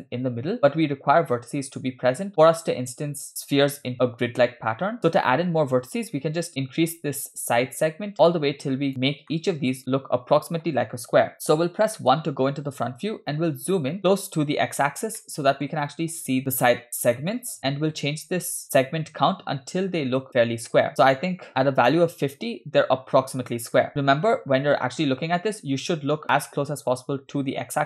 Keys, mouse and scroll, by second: 7.4-8.9 shift+drag, 9.4-9.7 shift+middle drag, 11.3-11.9 scroll down 2, 12.1 KP_1, 13.0-13.5 scroll up 4, 14.0 shift+middle drag, 15.3-15.8 shift+middle drag, 17.2-17.6 shift+middle drag, 18.6-21.9 shift+drag.